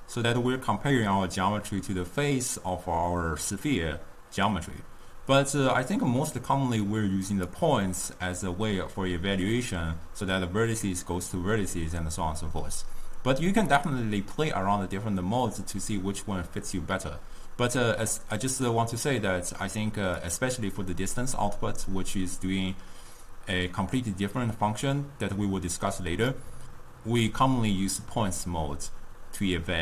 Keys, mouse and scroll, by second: 5.5-8.8 drag, 13.9-16.9 drag, 20.3-23.4 drag.